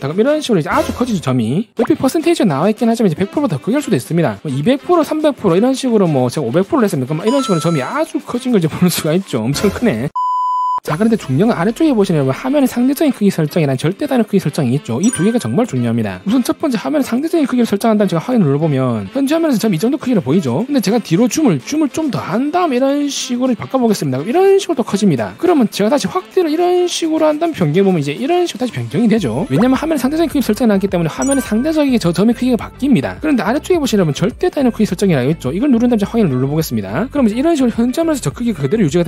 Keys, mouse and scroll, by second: 0.8 click, 6.6 5, 8.1 scroll down 2, 8.4 scroll up 1, 9.1 middle click, 9.7 scroll down 1, 18.6 click, 21.7-22.5 scroll down 4, 22.7 middle click, 22.9-23.9 typing, 23.6 click, 26.5-27.0 scroll up 3, 27.4 middle click, 27.5-28.5 typing, 28.3 click, 35.4 click.